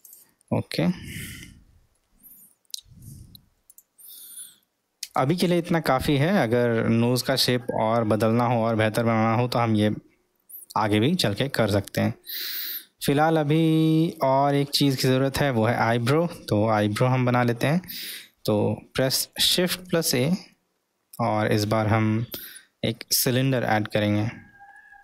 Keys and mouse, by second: 0.1 click, 0.4-1.0 middle drag, 2.0-3.0 middle drag, 3.7 click, 5.1 Tab, 6.3-8.4 middle drag, 9.1-11.1 middle drag, 12.7-18.1 middle drag, 18.6-19.1 middle drag, 24.8 middle click.